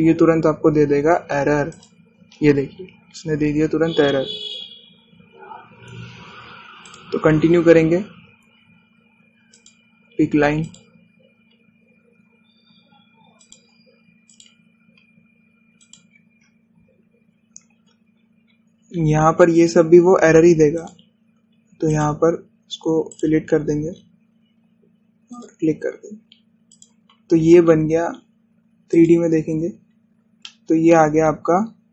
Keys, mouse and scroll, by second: 2.8 click, 4.7-5.7 scroll down 1, 7.4-7.7 scroll up 1, 7.9 click, 10.6 click, 14.5 click, 19.2 scroll up 1, 21.9 click, 24.2 click, 24.7 scroll down 1, 26.4 click, 27.8 click, 30.0 click, 30.9 scroll down 1, 31.6-31.9 shift+middle drag.